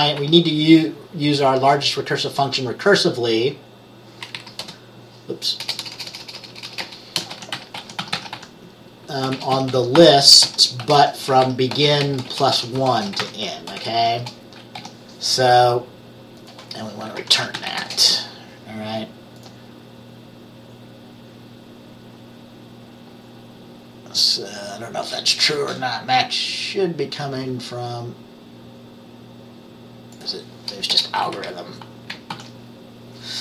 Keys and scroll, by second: 0.0-0.3 typing, 4.7 Return, 5.7-14.9 typing, 17.2-17.9 typing, 31.0 BackSpace, 31.4 Down, 32.4 ctrl+s.